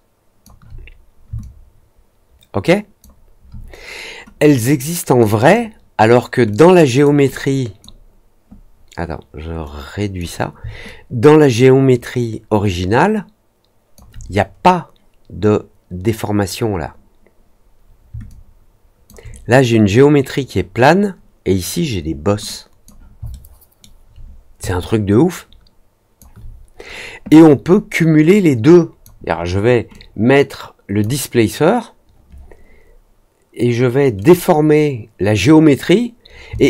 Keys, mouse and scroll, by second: 1.3 alt+click, 4.3 click, 6.4 click, 7.2 click, 9.6 click, 10.8-13.9 alt+drag, 18.2 alt+click, 22.4-22.8 drag, 23.2-23.7 alt+middle drag, 24.6-26.1 alt+drag, 28.2 click, 29.9-30.9 drag, 34.1 click, 36.5-36.6 alt+drag.